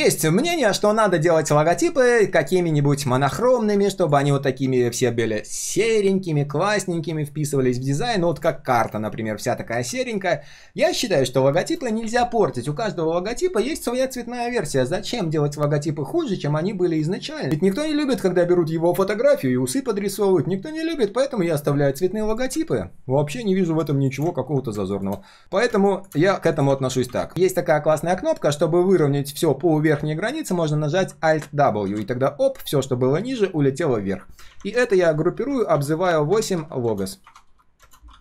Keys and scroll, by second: 27.3 alt+w, 27.3 ctrl+z, 31.9 alt+w, 34.5 ctrl+g, 34.8 ctrl+r.